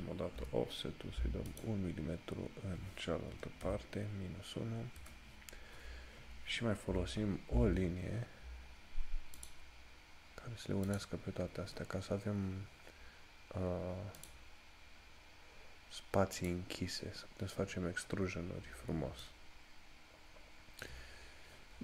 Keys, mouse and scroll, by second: 0.5 o, 7.2 l, 7.5 scroll up 1, 14.4 click, 18.3 scroll down 1, 19.4 shift+middle click, 21.0 scroll down 1.